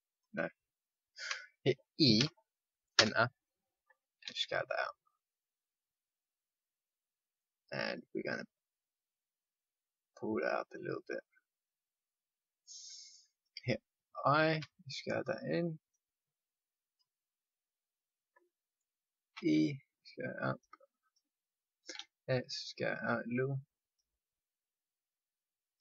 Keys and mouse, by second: 1.1 ctrl+z, 2.1 e, 4.2 s, 8.7-10.7 drag, 14.6 i, 19.3 e, 21.9 s, 24.7-25.8 drag.